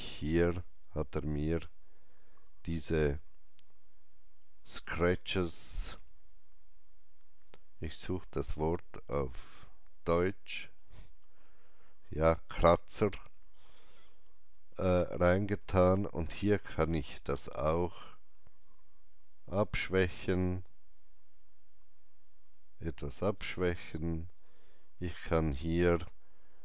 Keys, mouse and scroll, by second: 0.8 alt+scroll down 1, 1.3-2.2 alt+scroll down 1, 4.6 alt+scroll down 1, 4.7-14.6 alt+drag, 18.6-24.6 alt+drag, 18.6 alt+scroll down 1, 24.4 scroll down 1.